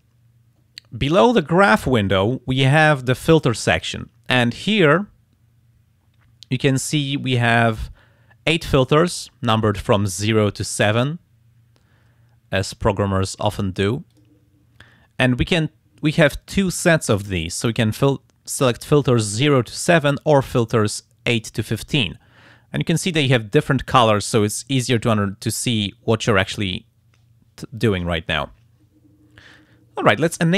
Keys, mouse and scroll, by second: 14.1 click, 19.7 click, 20.4 click, 21.3 click, 24.3 click, 25.7 click.